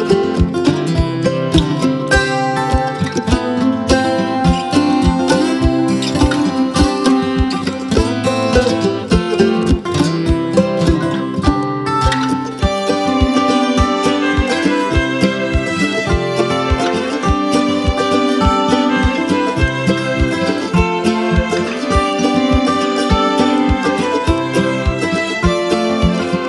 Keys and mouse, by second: 0.1 space, 0.2 click, 0.6 space, 0.9-1.5 click, 2.3 space, 2.4-4.5 click, 2.8 space, 2.9 click, 4.5 space, 4.6-5.2 click, 5.2 space, 5.3-6.5 drag, 6.6-9.9 typing, 6.6-7.3 click, 7.4-8.0 click, 8.1 click, 9.3 click, 9.9-11.2 drag, 11.6-14.7 typing, 11.7-12.3 click, 12.5-13.7 click, 13.1 click, 13.8-15.0 click, 14.4 click, 15.6-16.8 click, 16.8 space, 16.9-17.5 click, 17.5 space, 17.6-19.3 click, 18.6 space, 18.7 click, 19.1 space, 19.4-23.0 drag, 21.6-26.4 typing, 21.8 click, 22.4 click, 23.2-23.8 click, 24.0-24.7 click, 24.8 click, 25.8 click, 26.3 click.